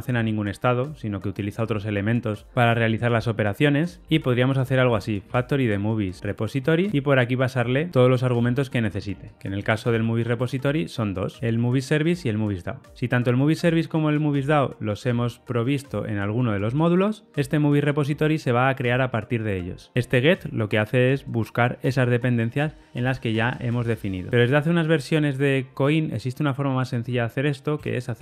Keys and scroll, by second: 6.8 Return, 7.9 Tab, 11.4 super+b, 12.6 super+[, 12.6 ctrl+alt+Left.